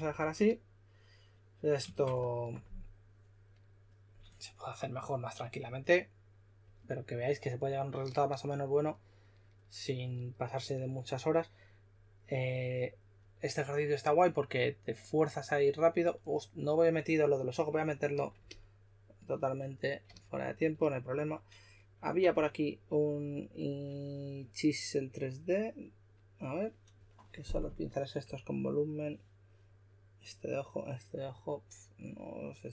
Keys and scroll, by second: 0.0-0.2 typing, 22.2 typing, 28.2 typing.